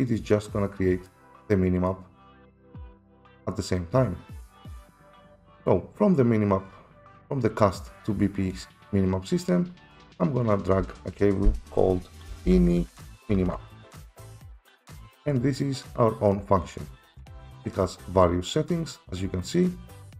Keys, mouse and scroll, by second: 1.1 click, 1.9 click, 10.5 click, 12.3-13.5 typing, 13.8 Return, 17.4 click, 18.1 right click, 18.1 typing, 19.9 right click.